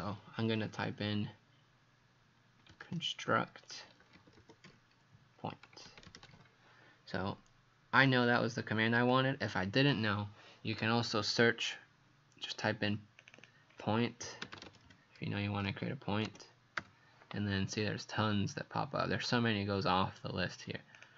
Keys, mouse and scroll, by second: 2.4-6.8 typing, 8.0 click, 13.4 click, 14.0-16.8 typing, 21.0 click.